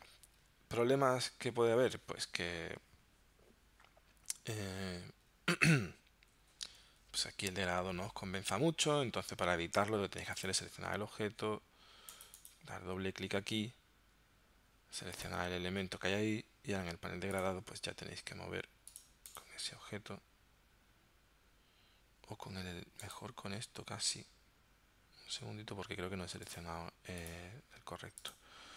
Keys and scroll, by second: 4.8 x.